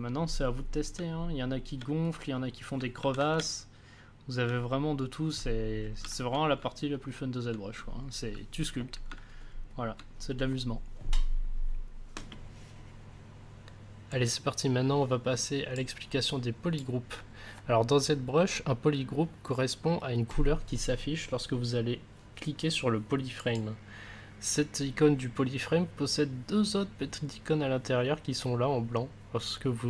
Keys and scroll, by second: 0.9 space, 2.9 ctrl+z, 3.4 space.